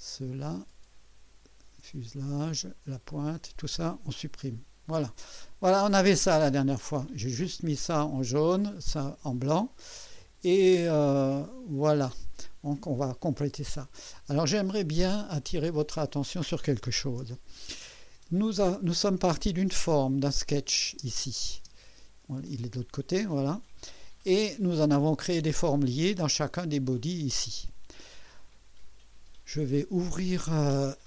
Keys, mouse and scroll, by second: 3.1 shift+click, 4.2 Delete, 5.5-6.8 drag, 7.1 right click, 9.8-12.1 drag, 12.7 scroll up 1, 13.4 scroll down 1, 14.0-15.4 drag, 15.4 right click, 17.0 ctrl+s, 17.9 click, 20.4 click, 20.9 space, 21.6 space, 22.5-24.2 drag.